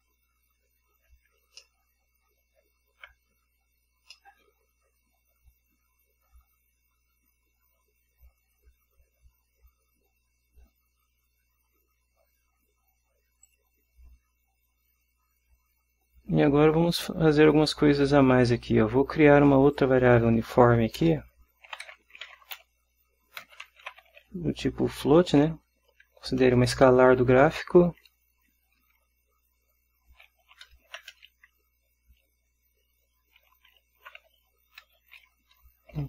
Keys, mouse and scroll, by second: 1.7-2.9 ctrl+drag, 4.3-12.6 drag, 13.6 click, 19.8 click, 21.1 Return, 21.8-24.3 typing, 25.6 t, 28.0 space, 30.6-31.5 typing, 33.6-36.0 typing.